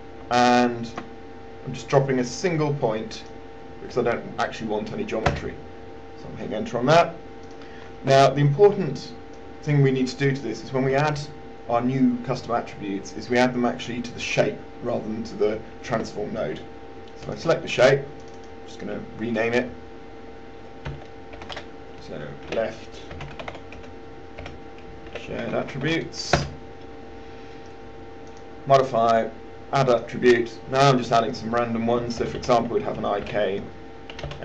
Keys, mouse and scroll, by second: 0.6 alt+click, 3.5 click, 5.5 Return, 7.9-19.7 drag, 21.1-21.6 typing, 23.1-26.5 typing, 26.6 Return, 28.7 click, 32.1 typing, 34.3 typing.